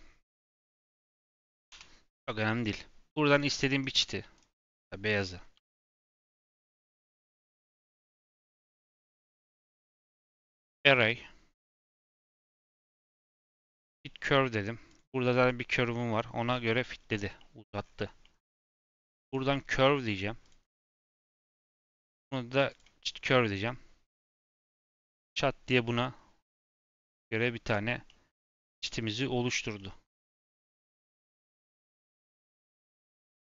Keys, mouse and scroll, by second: 3.2 click, 3.9 g, 4.6 click, 5.4 g, 6.3 click, 6.8 g, 7.7 click, 8.3 g, 9.5 click, 10.0-16.6 drag, 16.6-17.3 scroll down 9, 17.3 middle click, 17.8-18.2 scroll up 3, 18.2-19.2 middle drag, 19.2-21.6 drag, 21.8-23.2 drag, 23.2 middle click, 23.5 scroll up 3, 24.0-26.9 middle drag, 26.9-27.6 scroll down 3, 27.6 click, 28.0-29.4 middle drag, 29.4-29.7 scroll up 2, 29.7 middle click, 30.2 scroll up 1, 31.9 click.